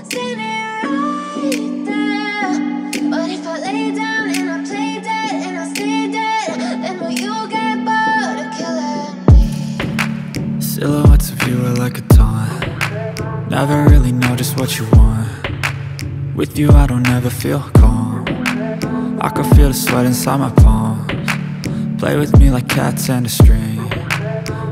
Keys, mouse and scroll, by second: 1.2-1.9 scroll up 3, 2.7-4.8 drag, 4.8-7.2 scroll up 1, 10.2-11.1 scroll down 5, 11.1-12.5 drag, 13.5-16.5 drag, 16.5-19.8 drag, 20.0-21.2 drag, 21.2-21.9 scroll up 1, 21.9 KP_1, 23.1 KP_Decimal, 24.3-24.7 scroll up 7.